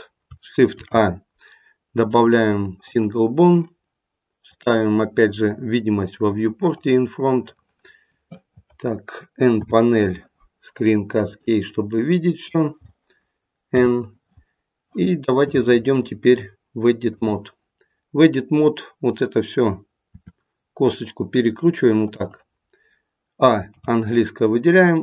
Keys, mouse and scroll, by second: 13.7 n, 16.2 click, 20.2 r, 23.7 a.